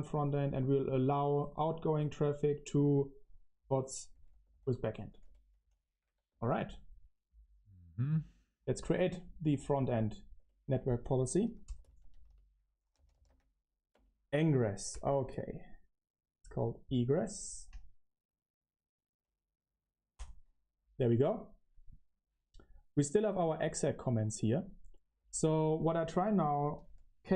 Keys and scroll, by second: 0.0-1.7 typing, 3.8-6.9 typing, 8.7-13.4 typing, 10.3 Return, 13.9 Return, 25.7 ctrl+r, 26.1-27.3 typing.